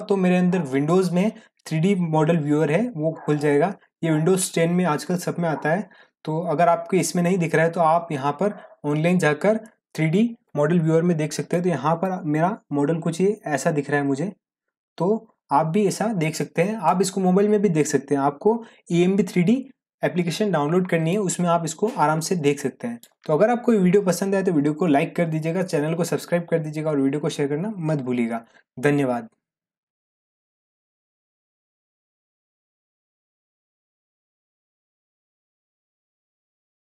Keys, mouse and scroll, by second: 11.5-15.2 drag, 21.1-23.3 drag.